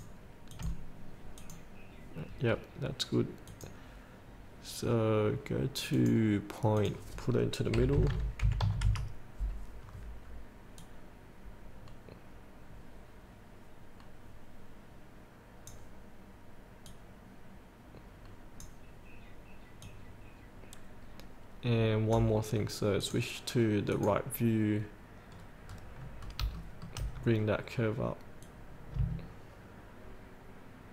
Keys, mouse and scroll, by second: 2.6 scroll down 1, 3.6 click, 7.9 KP_8, 8.6 KP_Decimal, 8.8 KP_5, 11.0-22.5 drag, 25.5-26.4 scroll down 2, 26.4 scroll up 1, 26.7 shift+middle click, 27.2 scroll down 1, 28.6-30.9 drag.